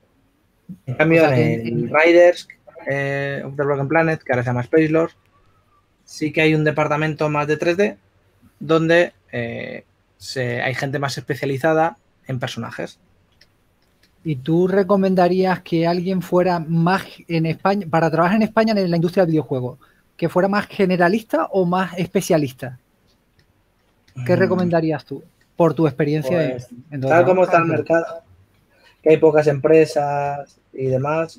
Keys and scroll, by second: 1.6 shift+s, 13.4 typing, 17.6 s, 24.4 s, 25.8 s, 30.0-30.4 typing.